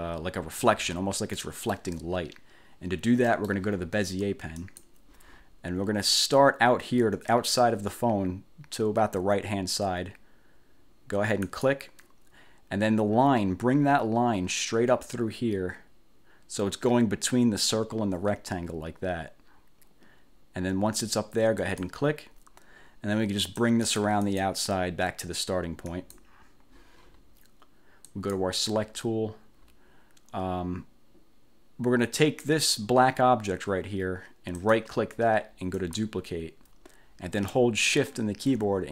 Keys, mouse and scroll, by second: 1.5 click, 3.3 click, 4.7 click, 11.6 click, 21.7 click, 23.5 click, 26.0 click, 28.2 click, 32.5 click, 34.7 right click, 35.9 click.